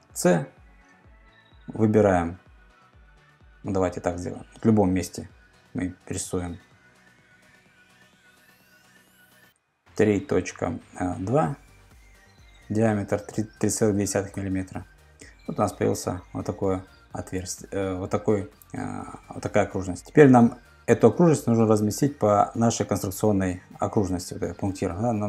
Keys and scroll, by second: 9.5 3, 10.1 ., 10.7 2, 14.4 Return.